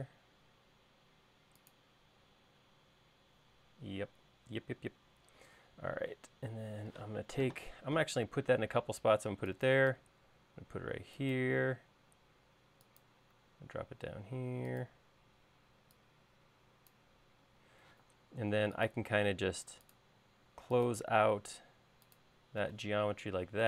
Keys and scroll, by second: 7.5 m, 15.7 e, 18.4 r.